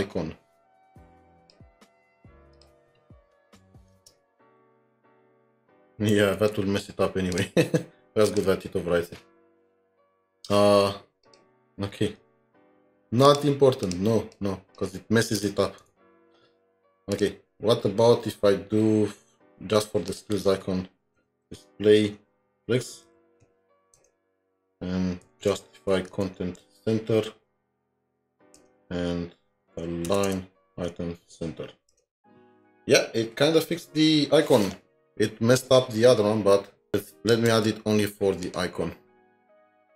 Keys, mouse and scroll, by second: 3.6 scroll up 1, 3.9 Right, 4.6-5.4 typing, 6.4 Escape, 13.8 double click, 14.3 double click, 15.4 BackSpace, 15.8 BackSpace, 21.1-21.8 typing, 22.2 Tab, 22.9-23.9 typing, 24.0 Return, 26.1 Tab, 26.6 typing, 28.6 Return, 30.3-31.3 typing, 32.0 Return, 37.5 ctrl+c, 37.5 typing.